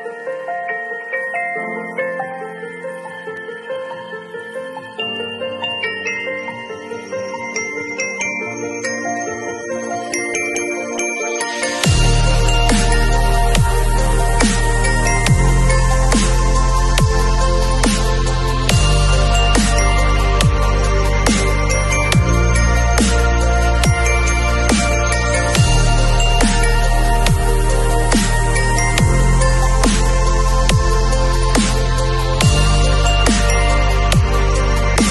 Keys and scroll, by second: 1.5 Return, 8.4 b, 9.4 x, 15.1 v, 18.8 b, 20.7 x, 28.2 [, 29.9 ], 31.6 [.